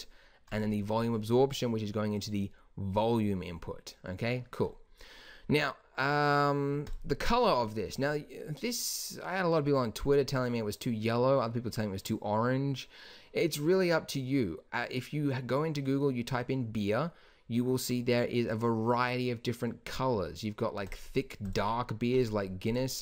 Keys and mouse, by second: 0.6-3.0 drag, 3.5 click.